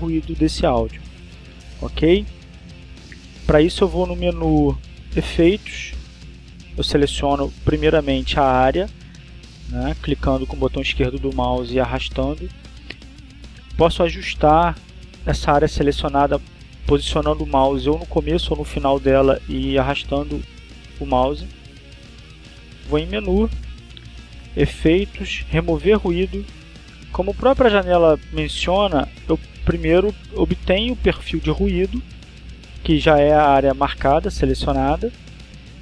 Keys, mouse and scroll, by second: 8.3-10.1 drag, 17.3-18.9 drag, 19.9-24.2 drag, 25.0 click, 27.5 click, 29.1 click.